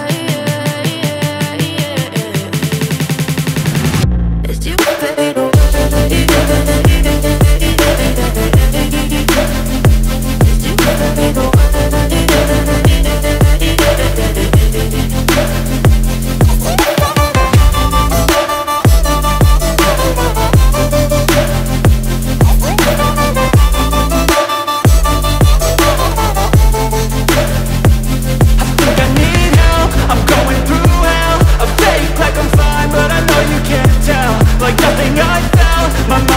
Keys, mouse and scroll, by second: 7.3 ctrl+z, 13.4 click, 23.0 shift+click, 28.8 space, 28.9 click, 29.1 space, 31.8 click, 31.9 alt+scroll up 1, 33.1 alt+scroll down 1.